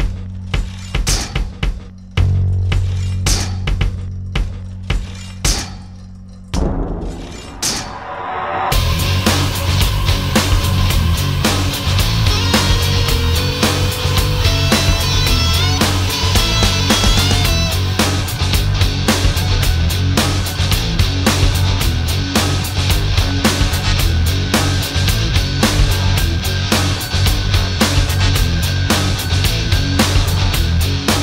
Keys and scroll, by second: 27.3 alt+space.